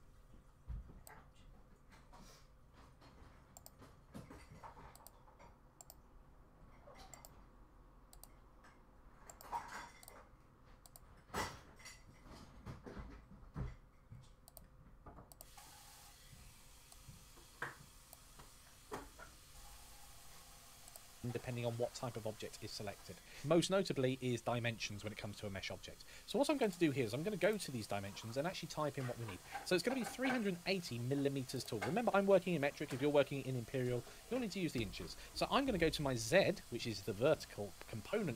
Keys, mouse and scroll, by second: 30.0 click, 36.0 click.